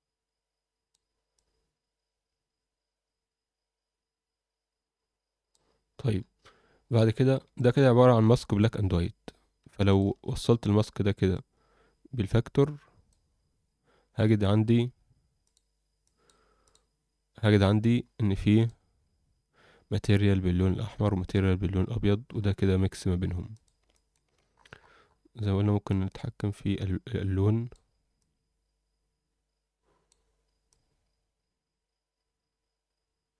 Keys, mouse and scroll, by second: 1.3-5.5 drag, 5.9-6.8 scroll down 4, 6.8-7.4 scroll down 5, 7.5 alt+shift+middle click, 8.2-9.6 scroll up 5, 9.6 scroll up 1, 9.9 ctrl+shift+click, 11.3-13.2 drag, 13.6-14.1 scroll down 3, 14.2 alt+middle click, 15.4-18.4 drag, 18.5 drag, 18.9-20.9 scroll up 2, 22.2-23.0 scroll up 4, 23.5 click, 23.9 alt+shift+middle click, 24.5-25.7 scroll up 4, 25.9-27.7 drag, 28.2-30.1 drag, 30.7-33.3 drag.